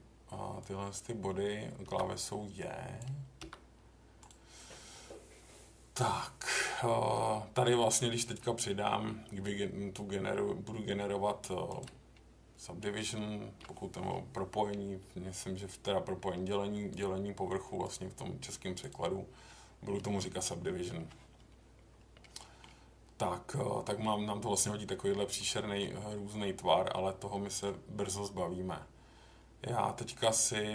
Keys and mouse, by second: 0.6 click, 1.8 j, 2.7 click, 3.4 j, 8.2-11.8 drag, 13.7 middle click, 17.9 click, 18.9 click, 22.3 middle click, 25.3 middle click, 27.5 click.